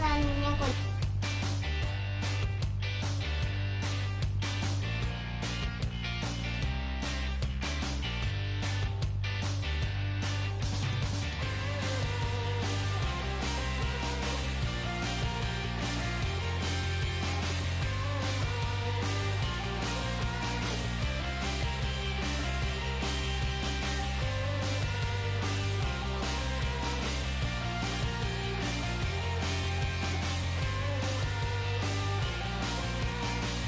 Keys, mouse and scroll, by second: 0.7 \, 2.7-4.1 right drag, 3.0 g, 4.1-5.4 middle drag, 5.4 g, 7.3 g, 9.2-10.9 right drag, 9.7 g, 11.0 ctrl+Tab, 11.7 right click, 12.2 right click, 12.6 f, 13.1 ctrl+Tab, 13.9 click, 14.2 middle click, 14.2 right click, 14.4 g, 16.0 middle click, 16.3-17.4 right drag, 16.5 g, 20.1-21.4 right drag, 20.2 g, 22.6 g, 23.7 g, 26.1 g, 27.2 g, 27.9 right click, 28.9-31.3 middle drag, 29.8 g, 32.5 Tab.